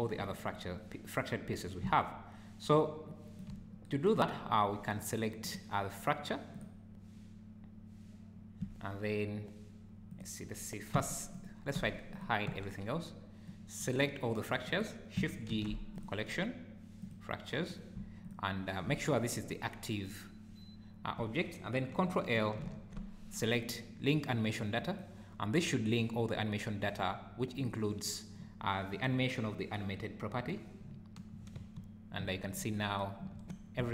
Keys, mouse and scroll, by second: 2.0 shift+right click, 4.3-4.8 scroll up 2, 5.5 click, 6.6 click, 10.1 click, 11.0 h, 11.4 click, 11.8 h, 12.1 click, 12.5 h, 13.5 click, 14.7 click, 15.5 shift+g, 18.2 shift+click, 22.6 ctrl+l, 24.9 click, 27.6 click, 31.6 space, 32.4-32.7 scroll down 4, 33.4 Escape.